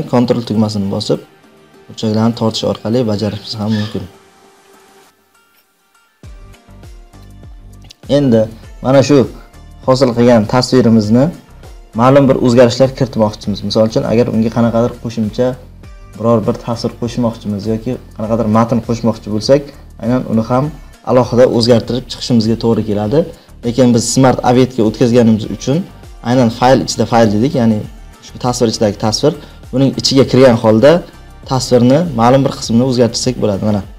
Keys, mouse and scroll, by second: 0.5 click, 6.7 click, 30.6 click, 30.7 click.